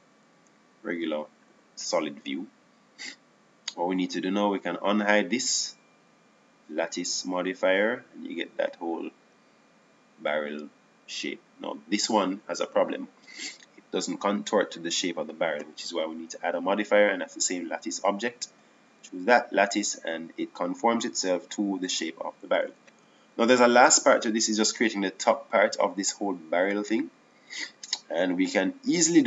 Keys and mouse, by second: 2.7 z, 22.2 click, 24.9 KP_7, 26.2 KP_1.